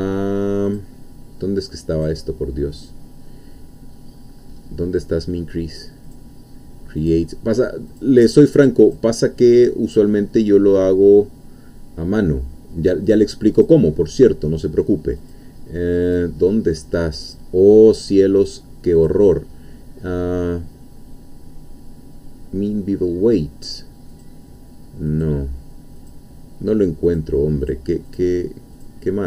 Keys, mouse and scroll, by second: 0.7-2.2 drag, 4.1-4.7 scroll up 2, 6.1-7.3 drag, 7.9 click, 8.9 click, 9.9-12.1 drag, 13.0-14.4 drag, 15.2 click, 16.1-17.5 drag, 19.0 click, 24.1 click, 25.1 click, 26.0 click, 27.1 click, 28.1 click, 28.8 click.